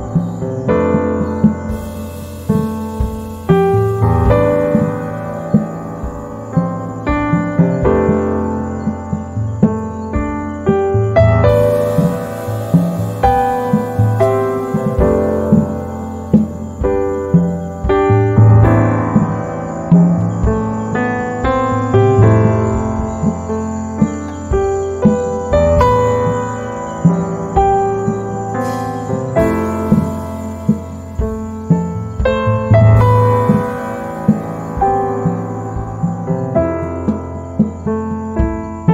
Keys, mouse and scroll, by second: 0.7-5.6 drag, 5.6 Down, 7.9 h, 8.0 click, 8.4 space, 9.9 shift+click, 17.0 click, 19.2-33.0 drag, 33.0 z, 33.1 click, 33.5 space, 33.8-37.1 drag, 37.1 ctrl+z, 37.6-38.9 drag.